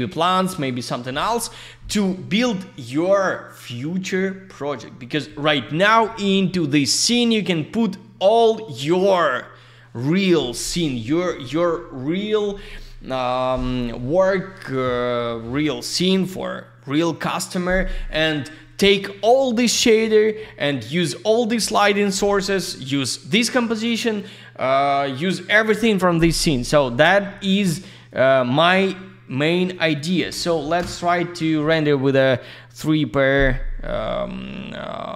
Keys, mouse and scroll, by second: 28.0 click, 30.7 Return.